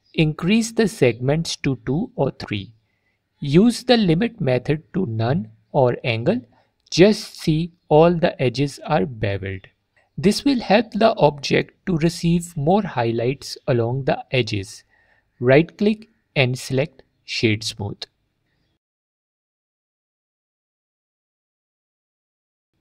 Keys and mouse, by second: 1.2 click, 3.5 alt+drag, 4.8-5.5 drag, 6.0-6.4 drag, 7.1 click, 16.1 click, 17.0 right click, 18.5 click, 19.3 F4, 19.6 click, 21.7 click, 22.7 ctrl+click.